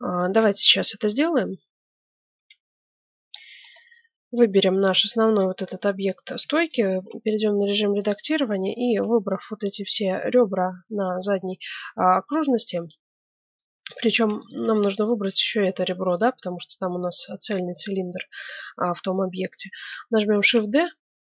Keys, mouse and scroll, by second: 2.3 F9, 3.2-5.3 middle drag, 6.4 Tab, 7.9-8.9 right drag, 9.1-10.7 right drag, 10.5 middle click, 12.8-14.3 middle drag, 14.3-16.1 right drag, 16.5-18.8 middle drag, 20.4 shift+d.